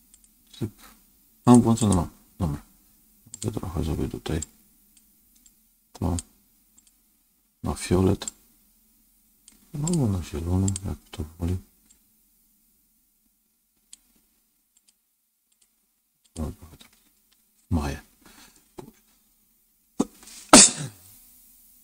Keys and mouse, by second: 0.0 click, 1.3 click, 1.7 click, 3.2 click, 6.0 click, 8.4 click, 12.5 click, 13.2-17.1 drag, 18.4-20.5 middle drag, 20.8 click.